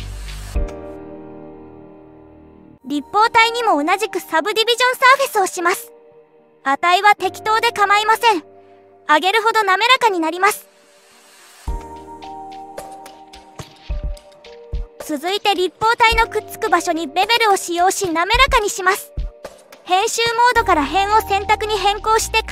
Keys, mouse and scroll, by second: 0.6 click, 3.1 click, 6.3-8.3 drag, 10.2 click, 11.4 click, 11.6 click, 11.8 click, 12.0 click, 12.1 click, 12.3 click, 14.4 click, 15.7 middle click, 17.0-17.4 scroll up 2, 17.7-18.7 middle drag, 19.6 click, 21.8 Tab.